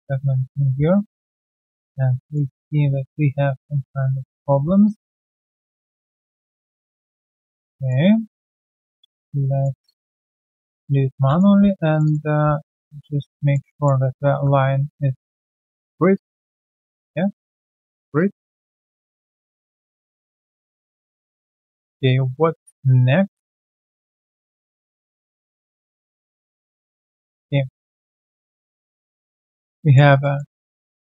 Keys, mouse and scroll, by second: 0.3 ctrl+shift+x, 1.0 alt+middle click, 1.7 alt+middle click, 1.8 alt+click, 5.6 scroll down 1, 6.4 Return, 6.4 alt+click, 7.0 alt+middle click, 7.3 alt+right click, 7.7 alt+click, 10.8 Return, 11.0 right click, 11.5 typing, 12.0 double click, 12.5 alt+middle click, 12.8 alt+click, 13.1 alt+right click, 13.4 alt+middle click, 13.7 alt+click, 14.3 typing, 16.1 alt+click, 16.5 alt+middle click, 16.8 alt+click, 18.7 alt+click, 19.1 alt+middle click, 19.3 typing, 19.5 right click, 20.1 alt+click, 20.3 alt+scroll down 1, 20.6 alt+click, 21.7 alt+middle click, 25.9 alt+click, 26.3 alt+right click, 26.5 alt+middle click, 26.9 alt+scroll down 1, 27.2 alt+click, 27.5 alt+right click, 27.8 alt+middle click, 28.5 alt+click, 29.3 alt+middle click, 29.7 alt+click, 30.2 alt+middle click, 30.6 alt+click.